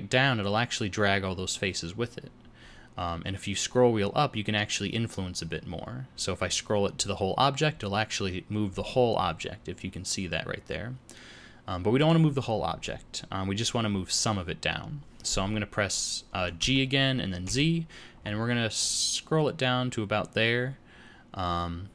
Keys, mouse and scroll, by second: 16.5 g.